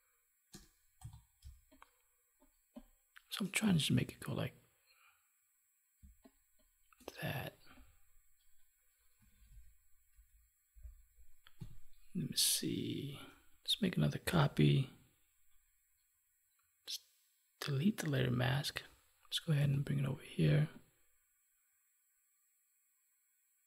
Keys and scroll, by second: 1.4 space, 6.0 space, 11.5 Delete, 14.3 ctrl+j.